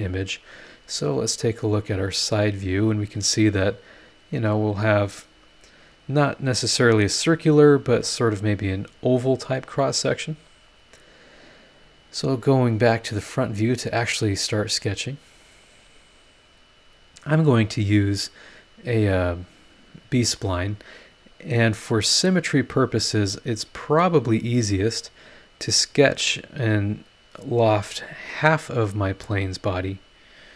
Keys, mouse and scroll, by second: 1.6 click, 1.9 middle click, 2.3-2.8 scroll up 2, 13.6 click, 14.4-14.7 scroll up 2, 15.0 scroll down 2, 17.5-20.9 middle drag, 20.9 click, 24.7 click, 27.5 click, 28.9 click, 30.2 click.